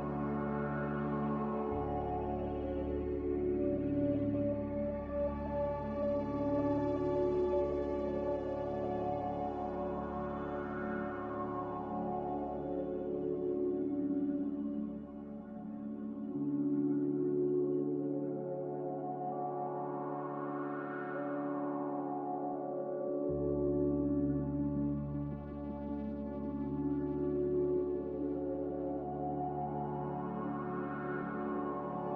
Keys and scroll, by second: 6.8 n, 14.4 a, 16.0 n.